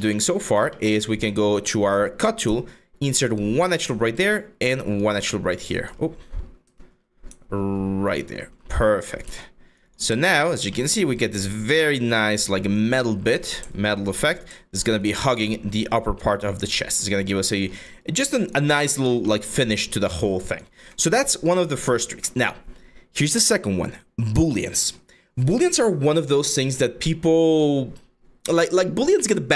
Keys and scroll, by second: 4.9 3, 5.6 1, 8.2 3, 8.9 q.